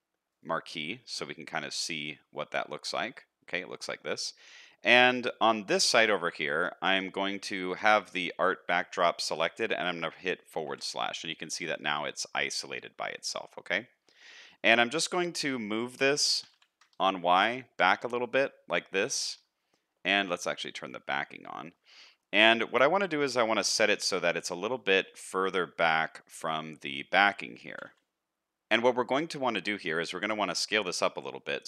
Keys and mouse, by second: 1.1-4.0 middle drag, 10.6 KP_Divide, 11.4-11.7 middle drag, 12.0 shift+middle click, 12.4-13.8 middle drag, 14.2 shift+middle click, 14.5-14.9 middle drag, 15.4 middle click, 16.2 g, 19.6 middle click, 21.3 shift+middle click, 21.9 shift+middle click, 22.3 middle click, 23.7 shift+middle click, 24.0 middle click, 25.1 middle click, 26.6 shift+middle click, 27.7 g, 28.3 middle click, 29.3 shift+middle click, 29.6 middle click, 30.5 middle click, 31.4 middle click.